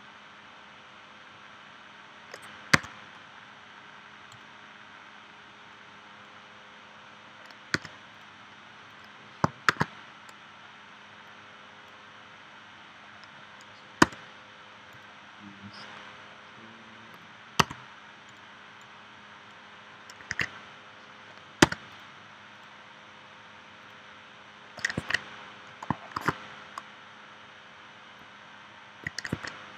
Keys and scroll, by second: 2.8 a, 7.8 v, 9.7 shift+w, 14.0 v, 17.6 a, 20.3 super+z, 21.6 v, 26.1 shift+w, 29.3 super+z.